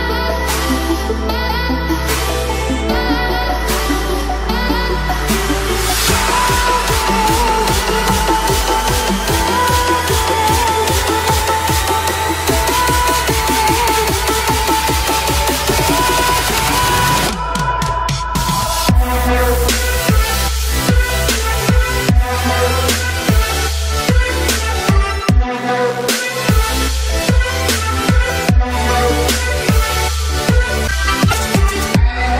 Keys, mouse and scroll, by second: 1.6 alt+click, 18.4 typing, 27.7 ctrl+click, 27.9 typing, 28.0-30.2 drag, 30.4 space, 30.5-32.3 drag.